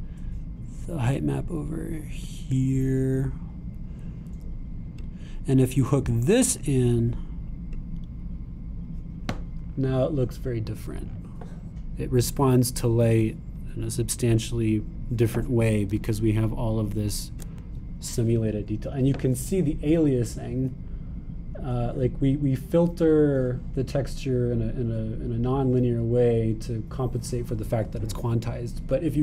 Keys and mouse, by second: 1.6-8.1 drag, 8.1 right click, 8.8 click, 9.5-13.0 right drag, 13.7-15.0 right drag, 16.9-29.2 super+drag.